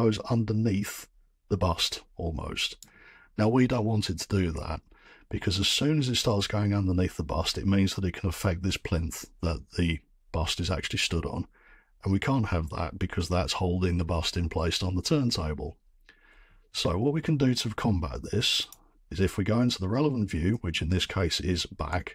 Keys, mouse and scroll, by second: 2.7 right click, 5.6-6.4 scroll, 11.0 scroll, 18.7 click, 19.5-20.4 scroll, 20.4 middle click, 20.5 middle click, 20.6-21.0 scroll, 20.9 middle click.